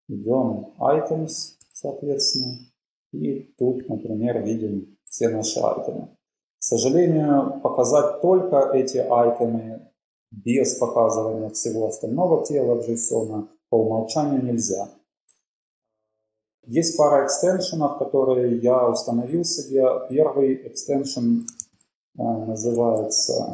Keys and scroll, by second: 0.0 Down, 0.1 Down, 0.2 Down, 0.8 Up, 1.8 alt+super+], 2.5 Down, 2.8 Up, 4.0 alt+super+], 4.5-4.8 Down, 5.0 Down, 5.2 Down, 6.0 Down, 7.5 Up, 8.5 Up, 9.1-9.6 Down, 10.3 Up, 10.5 Up, 10.7 Up, 11.7 super+Up, 12.2-13.0 Down, 14.0 Down, 21.6 shift+super+x, 23.0-23.5 typing.